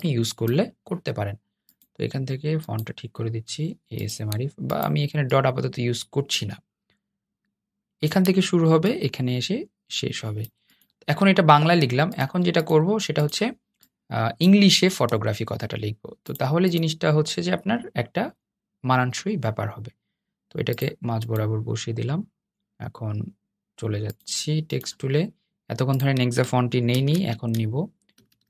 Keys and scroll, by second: 23.3 t.